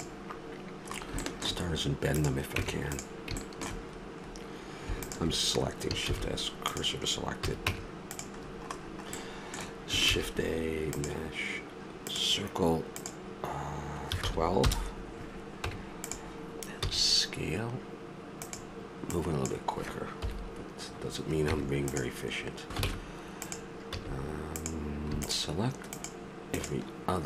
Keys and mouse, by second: 0.9-2.2 middle drag, 2.2 right click, 2.5 Tab, 3.9 middle click, 6.1 shift+s, 7.4 a, 7.7 Tab, 10.1 shift+a, 13.0-14.9 drag, 15.6 Tab, 16.8 s, 20.2 KP_7, 21.5 Tab, 22.9 ctrl+Tab, 23.9 a.